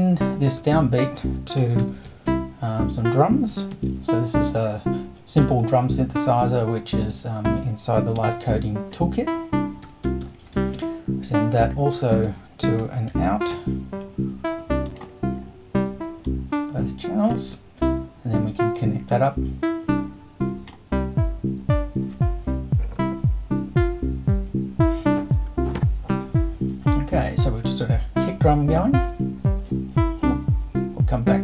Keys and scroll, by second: 0.7 super+i, 1.6 super+d, 1.8-4.2 typing, 8.2 super+i, 9.6-14.0 typing.